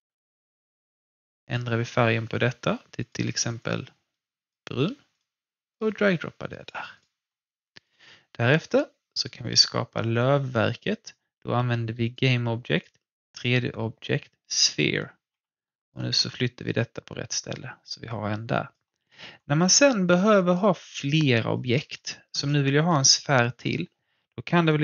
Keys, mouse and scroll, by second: 1.4-6.9 drag, 12.0 click, 15.0 scroll down 1, 15.3 w, 15.7-18.5 alt+drag, 19.5 alt+middle click, 19.8-20.3 alt+scroll up 2, 20.3 alt+click, 20.3 typing, 21.5 alt+click, 21.9 alt+middle click, 22.4 alt+click.